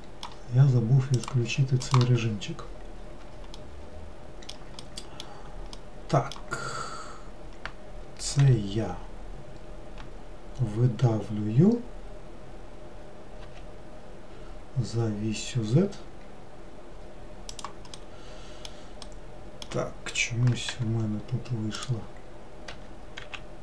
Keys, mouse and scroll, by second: 1.3 click, 3.1-3.7 scroll up 1, 3.7-6.9 middle drag, 6.9-8.5 scroll down 2, 8.5 e, 18.1-20.8 middle drag, 20.8 g, 22.8 r.